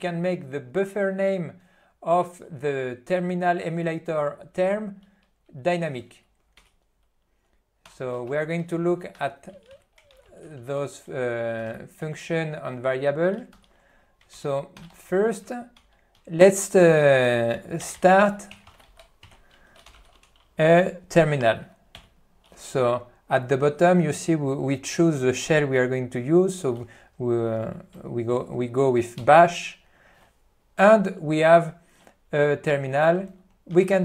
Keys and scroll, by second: 8.5 p, 9.2 e, 9.6 b, 10.2 alt+c, 10.5 n, 11.8 ctrl+n, 13.6 ctrl+g, 14.4 ctrl+g, 15.1 n, 15.8 Return, 16.3 q, 22.1 Return, 29.4 Return, 33.8 alt+:.